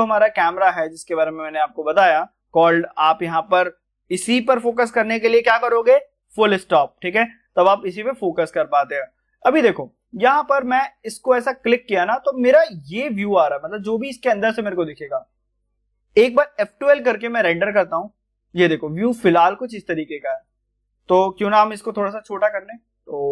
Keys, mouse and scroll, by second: 0.3-0.7 scroll up 1, 1.4 click, 7.5 click, 7.6 scroll down 1, 8.2-9.9 middle drag, 9.9 click, 10.3 scroll down 1, 10.6 middle click, 11.1 click, 11.6 middle click, 12.7 scroll up 1, 13.7-16.7 middle drag, 16.7 F12, 18.1-18.7 scroll down 1, 18.7 scroll up 1, 19.7 click, 21.9 s.